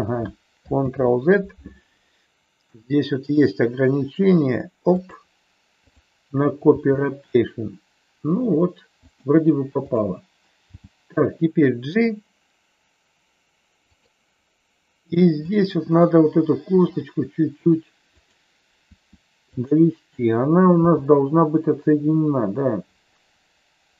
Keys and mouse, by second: 0.8 ctrl+z, 2.7 r, 4.9 click, 5.8 click, 6.7 g, 10.7 g, 13.8 click, 15.4 click, 16.7 r, 18.8 r, 19.4 click, 20.8 g.